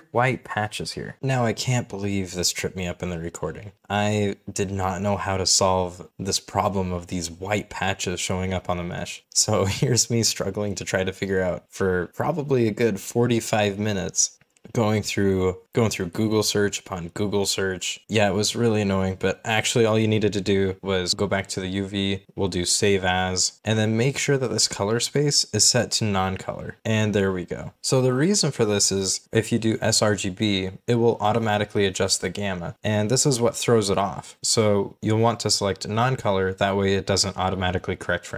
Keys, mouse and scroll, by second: 0.9 scroll down 1, 1.5 1, 1.7 scroll down 1, 1.9 Return, 2.2 middle click, 2.3 scroll up 1, 2.4 shift+middle click, 2.5 scroll down 1, 2.8 right click, 3.1 scroll up 1, 3.3 shift+click, 3.7 scroll up 1, 3.9 scroll down 1, 4.2 b, 4.4 scroll down 2, 4.7 scroll up 1, 5.2 double click, 5.7 scroll up 1, 5.9 middle click, 6.1 scroll down 1, 6.2 scroll up 1, 6.7 ctrl+middle click, 6.9 c, 7.0 scroll down 1, 7.0 shift+middle click, 7.2 scroll up 1, 7.7 scroll down 1, 8.0 double click, 8.1-8.4 scroll up 2, 8.2 double click, 8.7-9.9 scroll down 2, 9.0 Tab, 9.1 Return, 10.0 1, 10.2 scroll up 1, 10.4 middle click, 10.8 Return, 10.9-11.2 scroll up 2, 11.2 middle click, 11.3 o, 11.5 BackSpace, 11.6 scroll up 1, 11.7 scroll down 1, 11.9 scroll up 1, 12.5 scroll down 1, 12.7 right click, 13.2 middle click, 13.3 Tab, 13.4 middle click, 13.6 scroll down 1, 14.2 middle click, 14.3 z, 14.5 middle click, 14.8 middle click, 14.9 middle click, 15.3 scroll down 1, 15.6 scroll up 1, 15.7 space, 15.8 Return, 16.3-16.6 scroll down 2, 16.7 middle click, 17.0 middle click, 17.4 Return, 17.5 double click, 17.6 Tab, 17.7 scroll down 1, 17.8 middle click, 17.9 scroll up 1, 27.7-28.5 scroll down 1, 29.1 shift+middle click, 29.6 shift+middle click, 34.4 scroll up 1, 34.8-35.2 scroll down 1, 35.2 middle click, 36.7-38.3 scroll up 1.